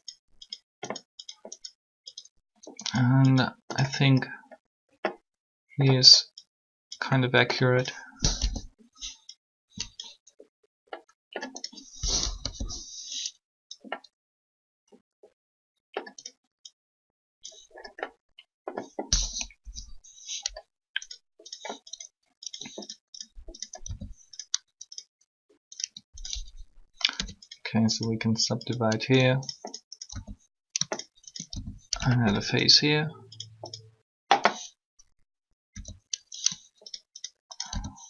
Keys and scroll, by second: 8.1 1, 12.3 1, 19.6 3, 26.9 shift+w, 35.6 e.